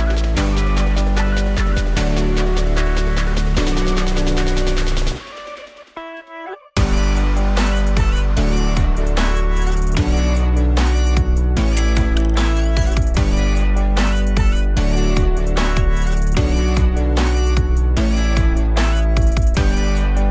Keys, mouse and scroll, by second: 0.5 click, 2.2-4.7 drag, 6.1-9.2 middle drag, 9.2 click, 11.6-12.7 drag, 12.7 middle click, 13.1-14.6 scroll up 1, 14.6-16.6 drag, 16.6 middle click, 17.5-20.0 drag, 20.2 click.